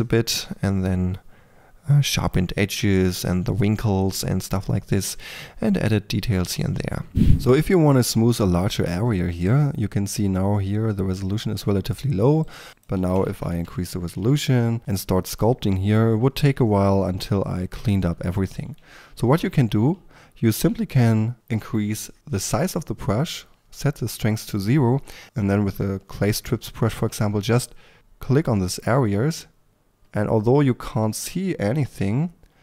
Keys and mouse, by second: 0.0-0.7 typing, 0.7-3.1 drag, 4.9-5.5 drag, 5.5 k, 5.7 click, 6.4 f, 6.5 f, 6.7 click, 12.4 click, 14.4 f, 15.0 f, 17.3-19.9 drag, 18.2 f, 19.9 f, 23.4-25.2 drag, 27.6-32.6 drag.